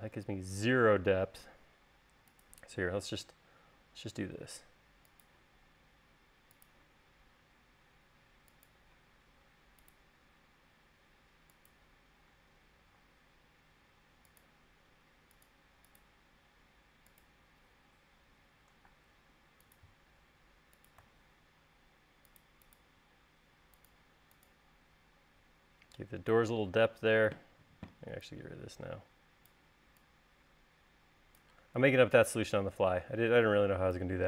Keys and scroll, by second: 1.6 l, 5.9 l, 19.2 space, 27.5 e.